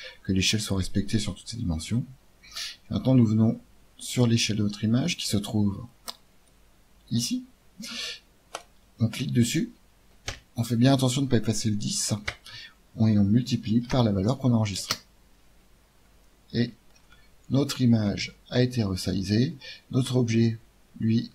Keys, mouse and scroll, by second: 5.8-8.1 drag, 8.5-10.3 drag, 16.6-21.3 middle drag.